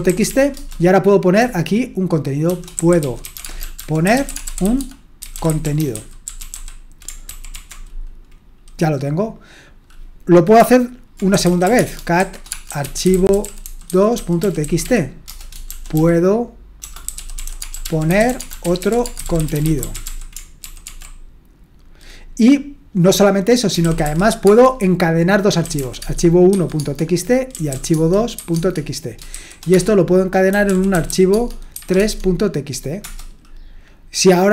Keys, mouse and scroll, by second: 0.0-0.8 typing, 2.3-6.5 typing, 7.3 ctrl+d, 7.6 ctrl+d, 8.2-8.9 typing, 11.1-20.0 typing, 20.6 ctrl+d, 20.8 ctrl+d, 23.7-24.4 typing, 25.6-31.7 typing, 33.0 typing.